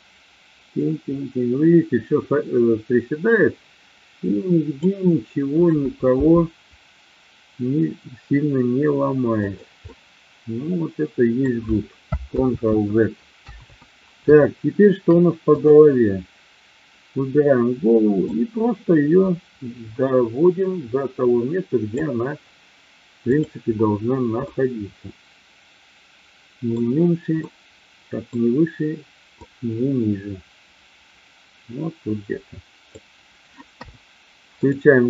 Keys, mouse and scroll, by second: 6.1 g, 9.5 click, 9.8-11.3 middle drag, 12.3 ctrl+z, 13.3 KP_1, 14.5 shift+middle drag, 15.5-16.5 drag, 18.2-21.8 drag, 23.2 drag, 24.3-26.7 middle drag, 27.3-28.3 middle drag, 29.5-33.0 drag, 33.6 KP_1.